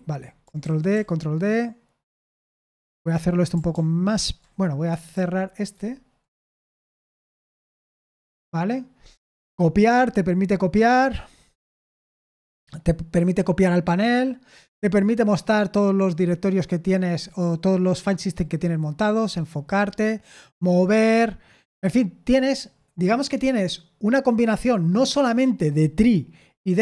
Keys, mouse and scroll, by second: 0.6 ctrl+d, 0.9 ctrl+d, 5.1 super+l, 6.8 super+q, 7.6 y, 11.7-16.0 scroll up 1, 18.8-19.4 scroll down 2, 19.4-19.8 scroll down 1.